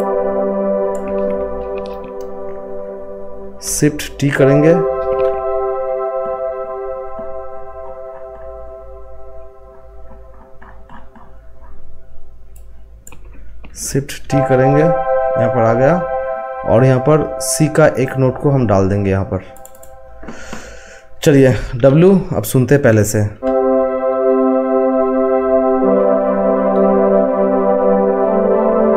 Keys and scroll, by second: 4.3 t, 14.2 t, 21.7 w.